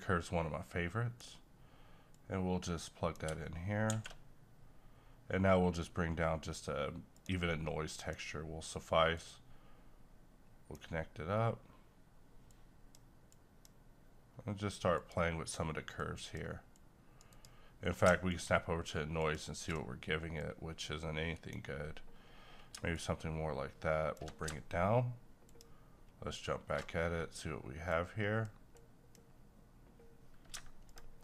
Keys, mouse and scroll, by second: 3.9 shift+a, 7.1-17.3 drag, 20.4-22.9 drag, 22.9-25.4 shift+drag, 27.9-30.8 drag.